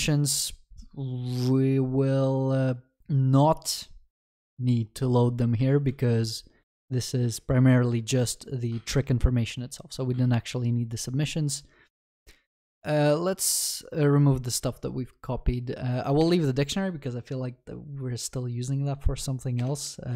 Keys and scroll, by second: 5.6 ctrl+x, 5.9 ctrl+s.